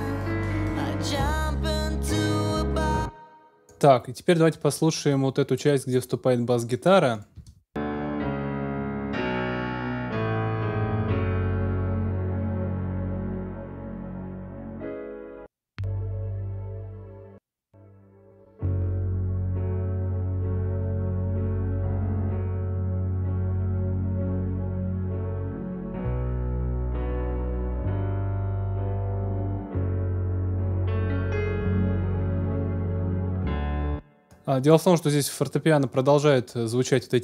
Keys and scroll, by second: 2.7 space, 7.3 space, 33.6 space.